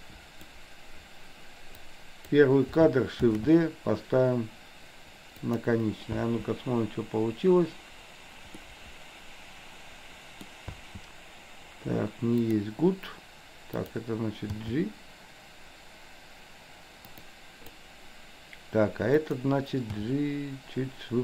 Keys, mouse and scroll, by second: 1.8-2.3 drag, 3.3 shift+d, 6.2 space, 8.7-10.5 middle drag, 10.8 space, 12.5 drag, 14.5 g, 17.2 click, 19.2 click, 20.0 g.